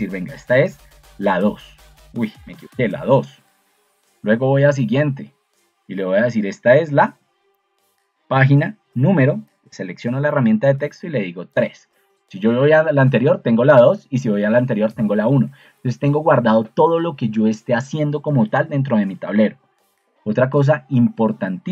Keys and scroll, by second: 1.1 3, 2.5 BackSpace, 2.7 BackSpace, 7.0 3, 10.8 3.